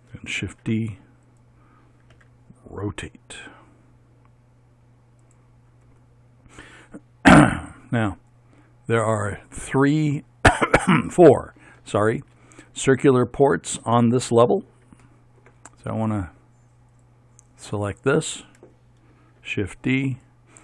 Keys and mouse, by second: 0.5 shift+d, 2.2 r, 6.0 middle click, 7.2-9.1 middle drag, 14.3 middle click, 15.1 middle click, 15.3 middle click, 17.5-19.4 right drag, 19.4 shift+d, 20.1-20.6 drag.